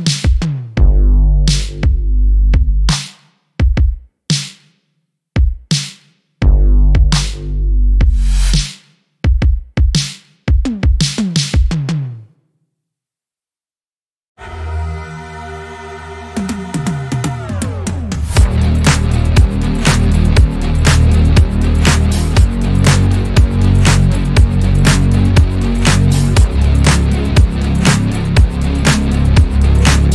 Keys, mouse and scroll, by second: 3.1 click, 3.5 shift+click, 4.4 s, 8.8 shift+middle click, 9.0 scroll up 1, 10.2 click, 11.3 2, 11.5 click, 12.2 s, 16.5 shift+middle click, 17.0 click, 17.7 s, 19.4 shift+middle click, 20.2 click, 20.9 s, 22.8 scroll down 1, 23.0-24.4 shift+middle drag, 24.4 click, 25.4 click, 26.6 shift+middle click, 27.3 click, 28.3 click, 29.6 click.